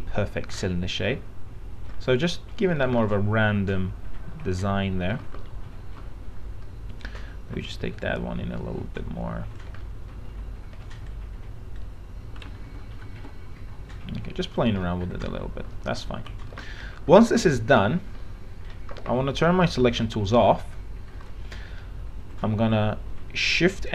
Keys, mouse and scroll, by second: 1.5 alt+middle click, 3.3-5.4 alt+middle drag, 5.7 alt+middle click, 7.1 click, 7.4 alt+middle click, 8.2-9.9 drag, 11.2 click, 12.8 ctrl+z, 13.4 ctrl+z, 14.1 click, 15.1 alt+middle click, 15.9 alt+middle click, 16.1 alt+f, 16.5 alt+z, 16.9-17.9 scroll down 1, 18.4 middle click, 18.8-19.1 scroll down 1, 20.3 click, 21.5 middle click, 22.1-22.7 scroll up 1.